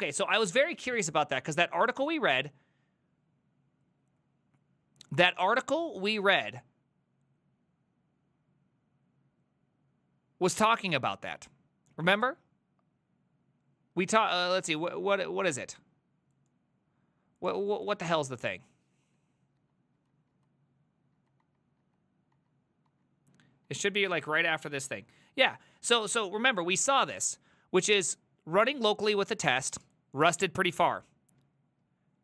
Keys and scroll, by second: 0.3 alt++, 19.6 ctrl+Tab, 20.0 ctrl+Tab, 20.4 ctrl+Tab, 21.2 ctrl+Tab, 21.5 ctrl+Tab, 21.8 ctrl+Tab, 22.4 ctrl+Tab, 22.9 ctrl+Tab, 23.7 ctrl+Tab, 24.2 ctrl+Tab.